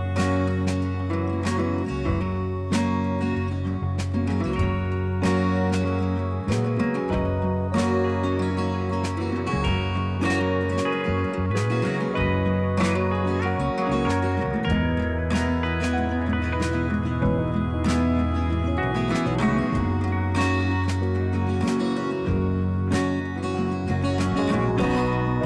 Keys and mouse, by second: 2.6 click, 3.6 ctrl+z, 4.9 click, 6.6 ctrl+z, 8.2 click, 10.0 click, 10.2 click, 11.7 click, 12.6 click, 13.7 ctrl+z, 15.1 click, 17.0 click, 21.2 click, 22.5 click, 23.9 click, 24.8 click.